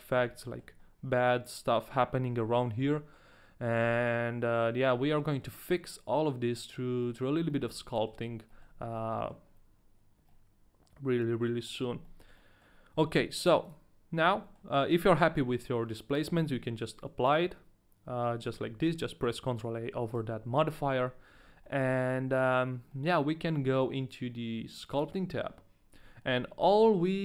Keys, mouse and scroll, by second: 0.6 shift+middle click, 0.6 scroll up 1, 0.7-1.5 scroll down 2, 1.5 scroll up 1, 1.7 middle click, 2.6 shift+middle click, 2.6 scroll up 1, 2.9 middle click, 2.9-4.0 scroll down 1, 4.0 middle click, 5.0 middle click, 6.6 middle click, 7.0 middle click, 7.7 shift+middle click, 7.9 middle click, 8.7 shift+middle click, 8.8 scroll down 1, 8.9 middle click, 9.4-9.7 scroll up 2, 10.3 middle click, 11.7 scroll down 1, 12.3 middle click, 12.3 scroll down 1, 12.3 middle click, 13.6 click, 14.1-14.8 scroll down 2, 14.6 shift+middle click, 14.6 click, 19.1 ctrl+a, 19.9 a, 20.1 right click, 20.5 ctrl+a, 21.3 ctrl+a, 21.3 right click, 21.8 ctrl+a, 21.8 right click, 21.8 shift+middle click, 21.9 middle click, 22.5-22.9 scroll down 1, 22.9 middle click.